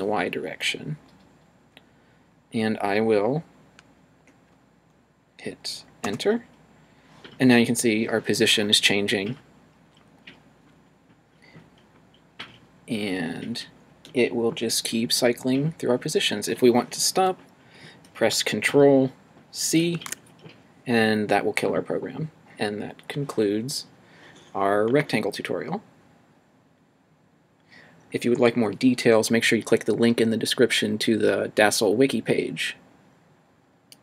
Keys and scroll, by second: 6.1 Return, 19.9 ctrl+c.